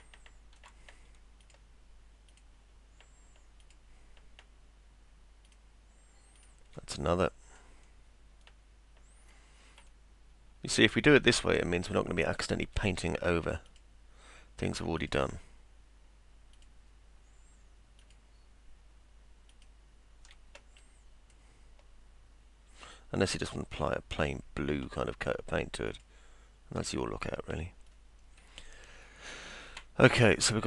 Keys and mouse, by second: 0.0 alt+middle click, 1.4 ctrl+click, 2.3 ctrl+click, 3.6 ctrl+click, 5.5 ctrl+click, 6.4 ctrl+click, 7.1 middle click, 9.9-11.2 alt+middle drag, 11.6 middle click, 13.7 ctrl+click, 15.0 ctrl+click, 16.6 ctrl+click, 18.0 ctrl+click, 19.5 ctrl+click, 20.8 middle click, 23.4 ctrl+click, 25.9 ctrl+click, 29.1 alt+middle click.